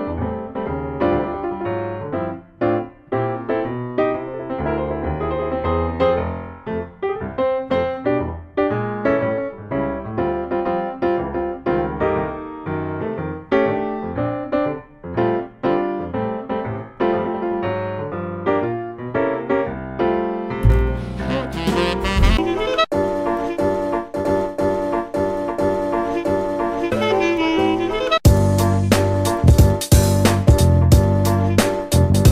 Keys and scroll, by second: 0.0-0.7 typing.